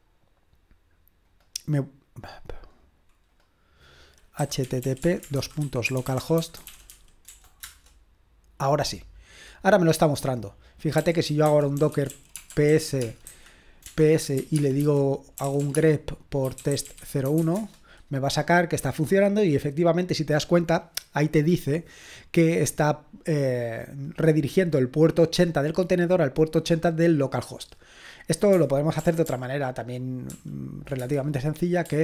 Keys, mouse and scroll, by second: 4.2-7.4 typing, 7.6 Return, 10.6 click, 10.7-17.9 typing, 29.0 ctrl+p, 29.3 ctrl+p, 30.3 ctrl+p, 31.0 Return.